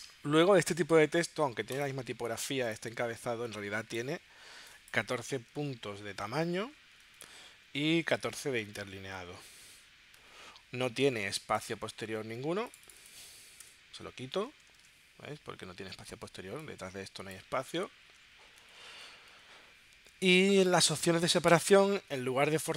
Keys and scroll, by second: 5.5 1, 6.2 4, 7.3 Tab, 8.1 1, 10.2 Tab, 13.7 0, 14.3 Tab.